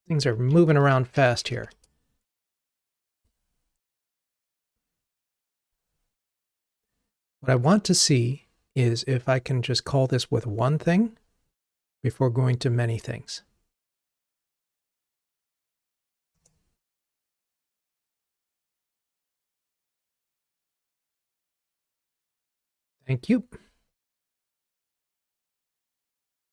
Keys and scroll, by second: 2.6 ctrl+r, 24.3 super+z.